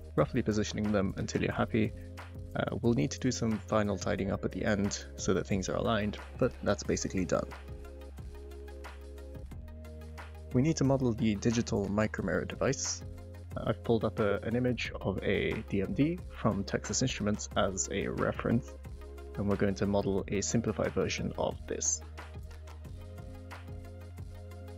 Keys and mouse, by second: 0.9 g, 1.2 y, 1.6 click, 2.0 g, 2.1 x, 2.5 click, 4.8 shift+middle click, 5.3-6.1 typing, 5.6 Return, 6.7 click, 7.6 g, 7.7 x, 21.5 middle drag, 23.6 click.